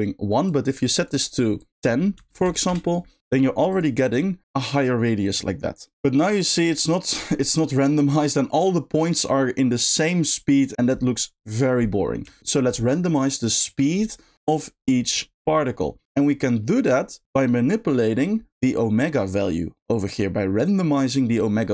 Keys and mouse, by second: 0.4 click, 1.5-2.7 drag, 3.7 click, 12.2 space, 15.7 middle click, 16.5 middle click, 17.5 middle click.